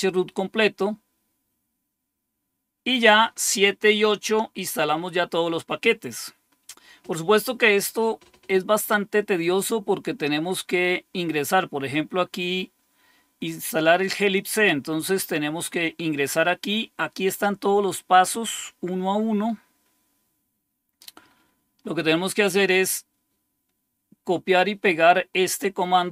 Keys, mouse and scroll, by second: 0.4-1.4 scroll down 2, 4.1 scroll down 1, 5.4-7.4 scroll down 3, 7.5-9.1 scroll up 2, 9.8-10.7 scroll up 2, 11.5-12.2 scroll down 2, 14.2 click, 19.1-19.8 scroll down 2, 20.7-21.4 scroll down 2, 21.4-21.9 scroll up 2.